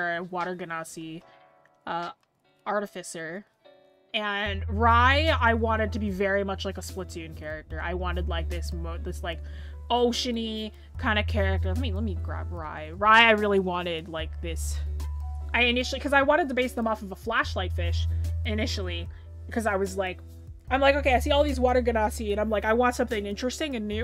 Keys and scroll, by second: 12.1 scroll up 1, 15.9 scroll up 1, 19.4-21.4 scroll down 1.